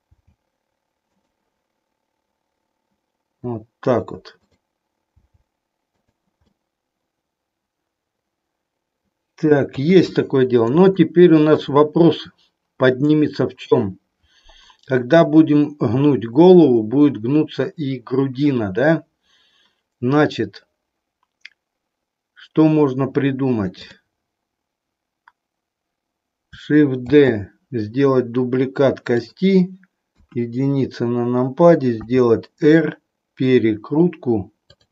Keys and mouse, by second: 0.1 g, 1.1 click, 4.3 click, 5.1 g, 6.6-9.6 middle drag, 9.7 KP_3, 11.0 middle click, 23.7 click, 27.1 shift+d, 30.1 KP_1, 32.0 r.